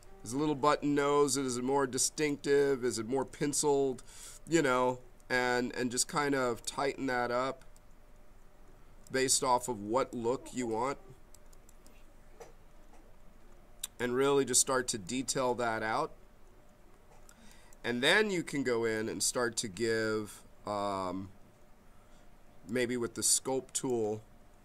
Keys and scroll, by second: 3.1 b.